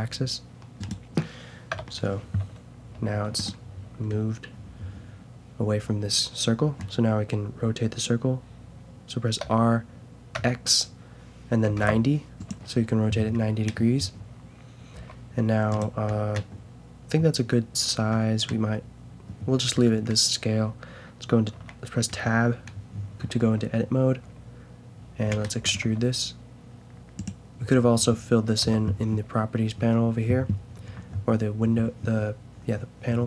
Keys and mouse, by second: 1.7 KP_0, 4.1-5.2 drag, 9.4 r, 13.4-15.3 middle drag, 14.9 s, 18.5-24.7 middle drag, 21.5 Tab, 25.6 e, 25.8 s, 26.8-27.9 drag, 28.6 t.